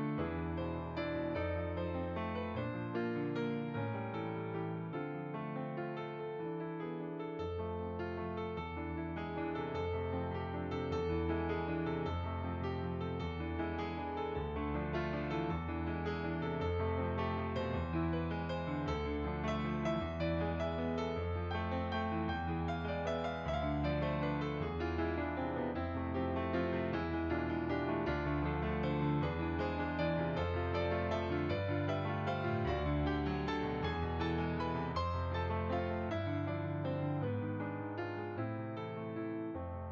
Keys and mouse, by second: 1.2 click, 1.8 f, 1.8 click, 3.1 f, 3.2 click, 3.6 f, 3.7 click, 6.2 f, 6.3 click, 10.1 f, 10.3 click, 10.8 click, 18.1 f, 18.4 click, 20.3 shift+click, 25.8 click, 26.9 shift+click, 30.0 f, 30.3 click, 33.5 f, 33.7 click, 36.2 f, 36.3 click, 39.7 click.